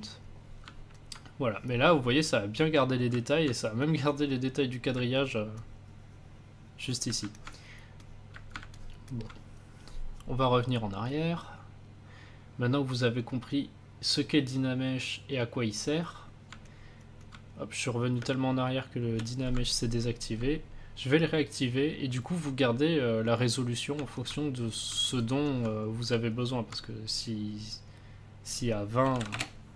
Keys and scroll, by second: 7.1 a, 18.1 space, 28.7-29.5 typing.